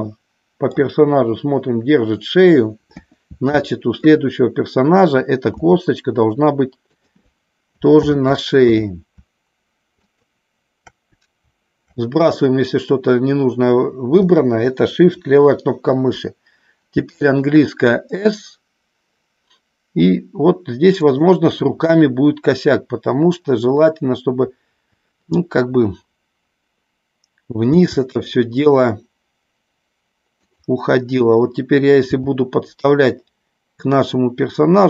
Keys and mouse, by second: 2.9 KP_1, 5.5 s, 6.9 click, 8.0 ctrl+z, 10.0-11.1 shift+drag, 17.0 s, 21.0 click, 27.7 g, 30.4 click, 32.0 g.